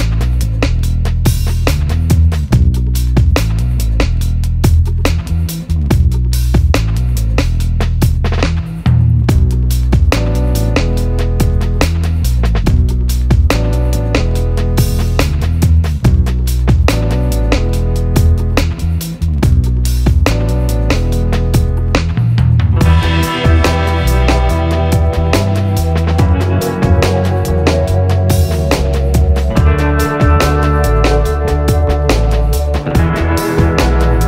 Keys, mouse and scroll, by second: 1.2-5.4 drag, 9.4 click, 9.5-17.9 drag, 17.9 right click, 21.0 click, 23.7-27.7 drag, 27.8-31.9 drag.